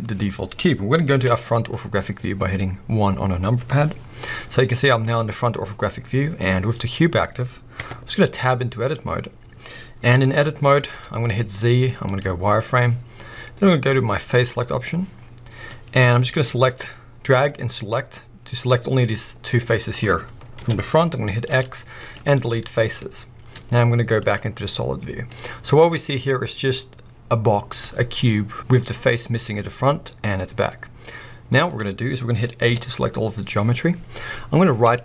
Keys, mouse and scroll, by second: 0.0-1.1 scroll up 1, 1.1 KP_1, 1.9-5.4 scroll up 2, 5.4-6.0 scroll up 1, 6.0-7.8 scroll down 2, 7.8 Tab, 10.9 z, 14.5 click, 18.5 scroll down 2, 18.7-21.5 middle drag, 20.6 KP_1, 21.5 x, 22.5 middle click, 23.5 z, 25.3 middle click, 26.0-31.9 middle drag, 31.9 scroll up 1, 32.7 a, 34.9-35.0 right drag.